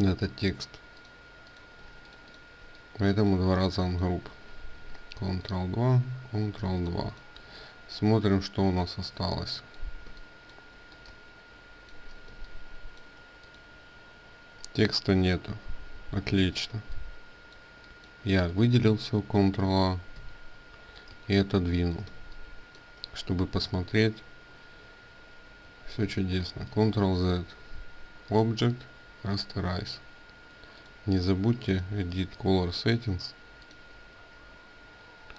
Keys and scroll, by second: 1.7 ctrl+alt+space, 4.0 ctrl+2, 5.7 ctrl+2, 6.3 ctrl+space, 16.0 ctrl+z, 19.9 ctrl+a, 25.7 ctrl+z.